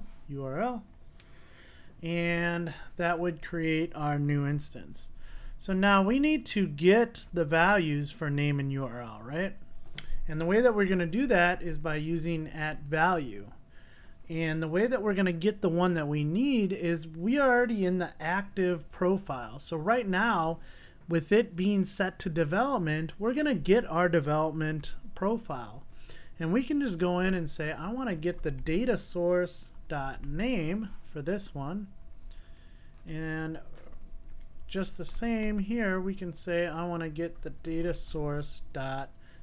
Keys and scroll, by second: 3.0 Return, 4.6 super+s, 12.9 Return, 33.3 Tab.